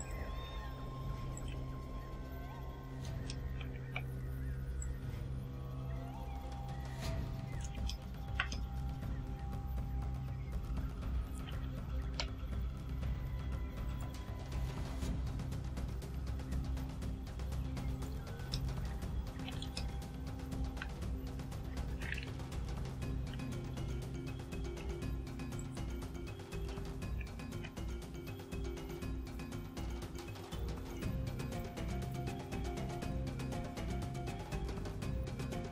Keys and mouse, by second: 0.0 click, 0.5 s, 1.3 click, 2.0 Tab, 3.3 ctrl+middle click, 3.9 ctrl+z, 4.8-7.8 drag, 7.9 ctrl+click, 7.9 ctrl+middle click, 8.5 ctrl+click, 10.9 Tab, 11.6 a, 13.9 click, 17.9 click, 18.5 middle click, 19.7 ctrl+middle click, 21.9 e, 23.3 z, 25.6 click, 26.6 a, 27.1 shift+right click, 28.1 shift+right click, 28.7 shift+right click, 29.2 shift+right click, 29.7 shift+right click, 30.5 shift+right click, 30.9 shift+right click, 31.5 shift+right click, 32.0 shift+right click, 33.0 shift+right click, 33.5 shift+right click, 35.1 shift+right click, 35.6 shift+right click.